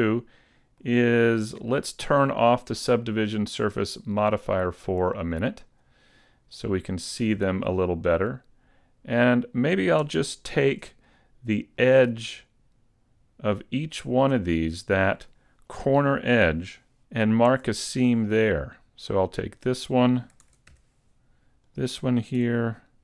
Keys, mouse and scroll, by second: 0.1 middle click, 1.2 shift+middle click, 5.6 click, 6.1-6.6 scroll down 2, 6.6 middle click, 8.4-9.0 scroll up 2, 10.3 alt+right click, 11.0 middle click, 14.0 alt+right click, 14.5 middle click, 17.2 shift+middle click, 17.2 scroll down 6, 17.4 alt+right click, 19.2 right click, 20.4 ctrl+Tab, 21.6 right click.